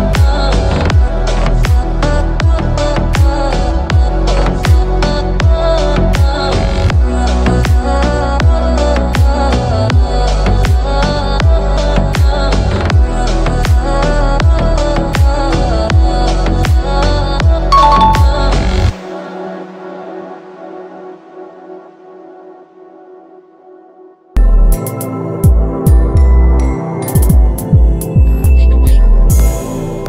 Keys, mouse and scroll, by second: 0.2 click, 5.2 click, 6.6 alt+click, 8.4 alt+click, 9.0 alt+click, 17.6 scroll down 1, 17.8 scroll up 1, 18.8 click.